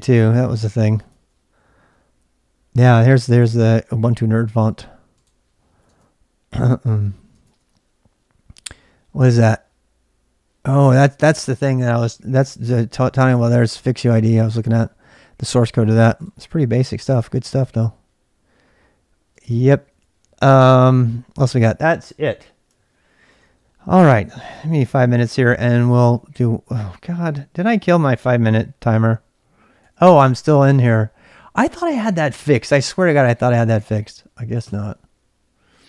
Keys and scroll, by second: 0.3 super+Tab, 1.0 super+Tab, 5.8 super+Tab, 7.1 super+Tab, 7.3 super+Tab, 19.8 super+Tab, 24.5-25.4 typing, 28.5 ctrl+c, 29.5-30.3 typing, 33.5-34.4 typing, 34.6 Return.